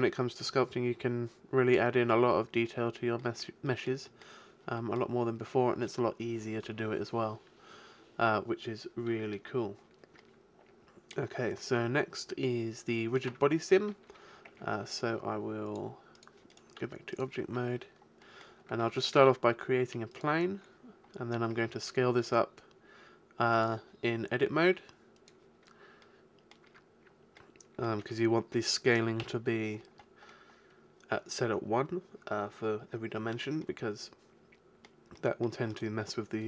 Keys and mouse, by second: 0.2-2.0 drag, 2.2-6.8 middle drag, 9.8-12.2 middle drag, 12.4 middle click, 13.3 Tab, 13.9 middle click, 14.5 Tab, 16.4 Tab, 16.5-18.2 drag, 16.8 x, 19.1 middle click, 19.2 shift+a, 21.1-22.4 middle drag, 21.6 Tab, 22.2 s, 23.8 click, 24.6 s, 24.8 click, 25.5-26.6 drag, 26.7 Tab, 27.2 middle click, 28.0 a, 29.2 n.